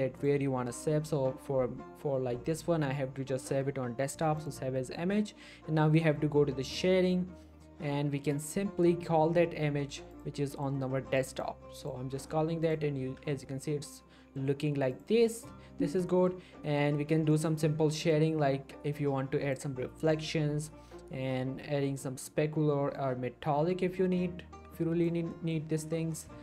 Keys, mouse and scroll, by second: 0.2 click, 4.4 click, 6.6 click, 12.0 scroll down 1, 12.2 middle click, 12.6 click, 13.0 g, 13.3 right click, 13.5-14.4 middle click, 14.6 scroll up 1, 14.9 click, 15.9 scroll down 1, 16.1 middle click, 16.9-17.2 scroll up 1, 17.3 middle click, 18.1-19.7 drag, 25.3 middle click, 25.6 scroll up 1, 25.8-26.4 middle click.